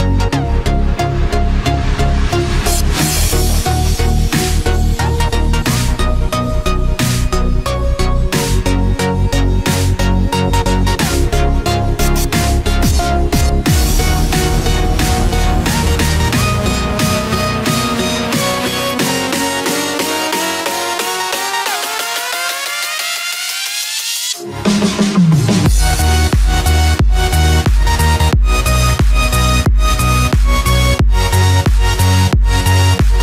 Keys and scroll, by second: 10.7 ctrl+-, 11.5 ctrl+=, 26.6 ctrl+-, 27.9 ctrl+=, 29.9 ctrl+z.